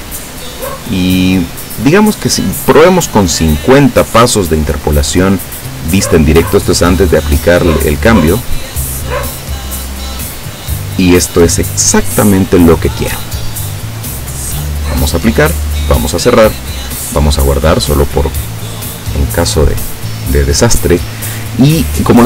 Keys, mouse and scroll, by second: 0.0 click, 7.2 click, 15.2 click, 15.9 click, 17.5 click.